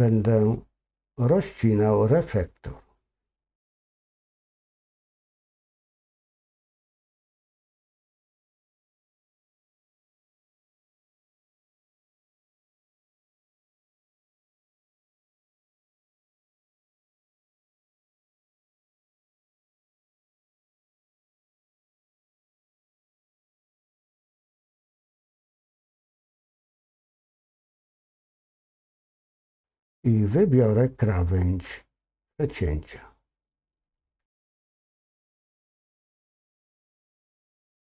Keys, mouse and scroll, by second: 2.7 click, 6.1 alt+shift+click, 12.9-17.6 drag, 21.5 ctrl+KP_Subtract, 23.2 x, 29.3 middle click, 34.2 click, 37.0 alt+shift+click.